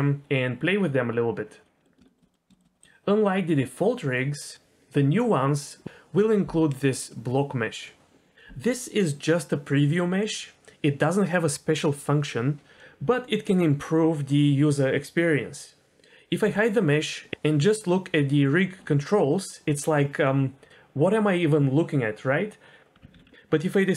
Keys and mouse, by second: 1.7 middle click, 2.1 shift+middle drag, 2.3 middle click, 2.5 shift+middle click, 2.7 middle click, 2.8-5.4 drag, 16.4 h, 23.1 alt+h.